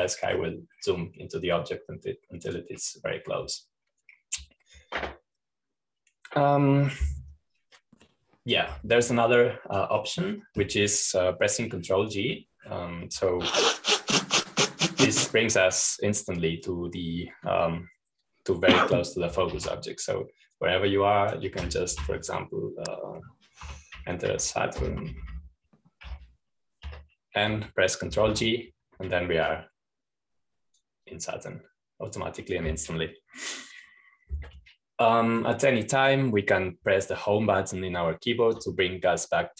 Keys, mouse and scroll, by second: 0.0-4.0 scroll down 2, 4.0-6.1 drag, 7.4 scroll up 2, 7.5-9.2 scroll down 2, 9.2-9.5 scroll up 2, 10.2-10.8 scroll down 2, 10.8-13.0 drag, 11.9-13.0 scroll down 1, 16.2-17.6 drag, 21.0 ctrl+g, 22.4-23.5 drag, 23.4 typing, 25.2-27.6 typing, 28.6 Escape, 29.8 ctrl+g, 31.0-34.8 drag, 37.0-38.2 drag.